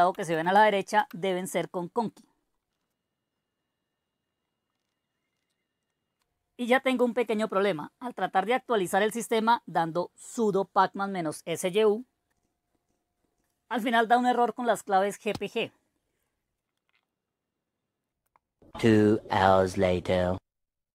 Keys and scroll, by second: 0.0-0.8 typing, 0.9 Return, 1.8-2.6 typing, 2.7 Return, 4.8 Return, 4.9 Return, 5.4 Return, 15.3 Return, 15.4 Return, 18.2 Return.